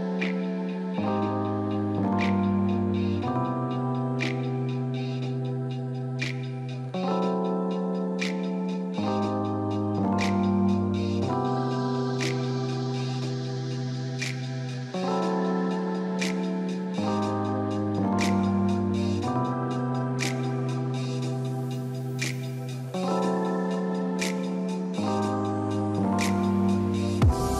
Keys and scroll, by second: 0.0-2.0 typing.